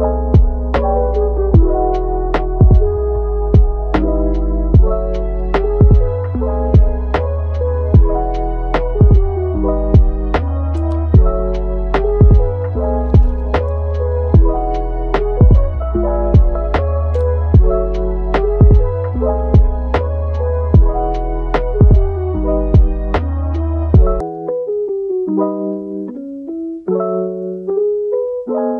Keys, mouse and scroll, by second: 0.0 scroll up 1, 0.2-0.6 middle drag, 0.6 scroll down 3, 0.8-1.8 middle drag, 1.8 click, 2.2 click, 2.6-2.9 middle drag, 2.9 Tab, 3.3 scroll up 1, 3.7 Tab, 4.0-4.8 shift+middle drag, 4.8 shift+d, 5.6 r, 7.6 middle click, 7.9 r, 9.4-10.3 middle drag, 10.3 g, 11.6 g, 13.2 Tab, 13.6 Tab, 14.8 click, 15.1 middle click, 15.9 shift+d, 16.9 Tab, 17.8 click, 18.0 g, 21.0 click, 21.3 g, 22.1 Tab, 22.4 scroll down 2, 22.7-23.8 middle drag, 23.8 scroll up 1, 24.0-25.2 middle drag, 25.2 click, 26.4 g, 27.2 Tab, 27.6-28.7 middle drag.